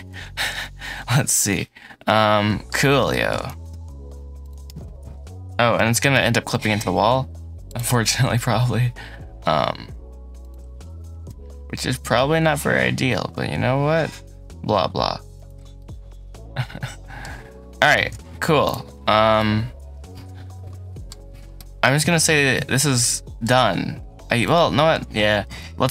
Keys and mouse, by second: 0.4 x, 1.5-2.6 drag, 3.0 shift+click, 3.4 s, 5.6 g, 5.8 y, 6.4 x, 7.9 s, 10.8 g, 11.1 z, 15.2 shift+middle click, 15.6-17.1 middle drag, 17.8 Tab, 19.2-21.0 middle drag, 21.4-23.3 middle drag, 25.4-25.8 shift+middle drag.